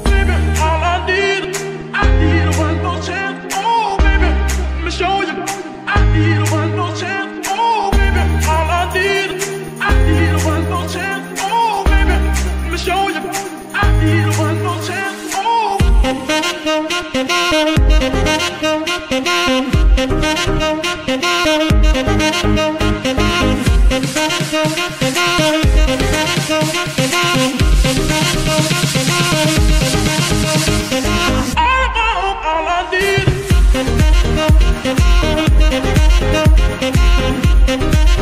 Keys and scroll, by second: 1.8 Escape, 2.9 shift+g, 3.0 shift+z, 4.5 r, 5.9 g, 6.1 y, 7.1 Escape, 14.4 g, 16.0 Escape, 19.1 r, 20.0 Escape, 21.3 r, 22.8 Escape, 24.4 r, 25.5 Escape, 30.7 r, 30.9 r, 33.4 g, 33.6 y, 34.2 Escape, 35.0-37.1 typing.